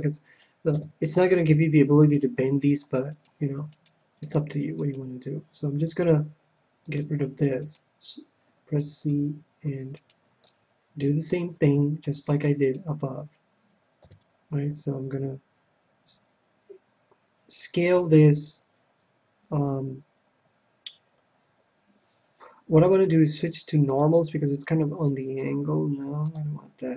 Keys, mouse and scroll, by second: 0.7 KP_7, 3.1-6.8 right drag, 6.8-8.6 drag, 7.4-9.5 right drag, 8.8 c, 10.0-11.7 right drag, 10.4-12.0 middle drag, 12.6-14.2 right drag, 13.9 KP_7, 23.0-24.6 drag, 26.2-26.9 drag.